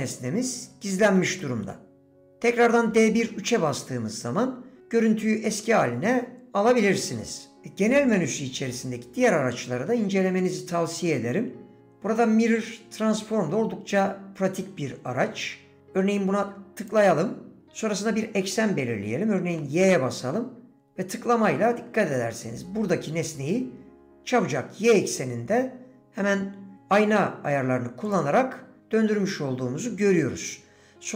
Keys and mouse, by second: 1.4 drag.